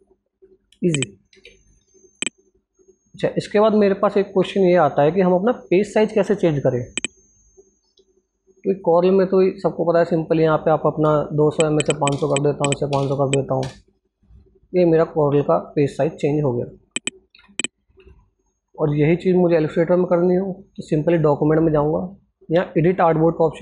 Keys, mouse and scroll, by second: 1.0 ctrl+z, 1.2 click, 2.3 ctrl+alt+scroll down 1, 3.2-3.7 ctrl+alt+scroll down 1, 3.7-4.1 ctrl+alt+scroll up 1, 6.9 alt+Num_Lock, 6.9 ctrl+alt+scroll up 1, 7.0 alt+Tab, 13.7 Return, 14.0 scroll down 1, 16.5 click, 17.3 Tab.